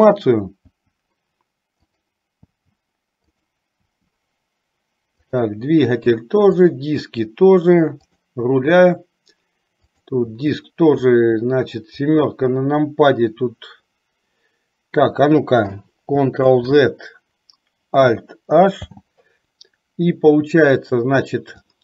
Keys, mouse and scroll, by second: 0.3 click, 0.9 h, 1.9 click, 3.6 h, 4.0 h, 5.9 h, 7.3 h, 8.3 click, 8.6 h, 10.5 h, 11.1 middle click, 16.5 ctrl+z, 18.9 alt+h.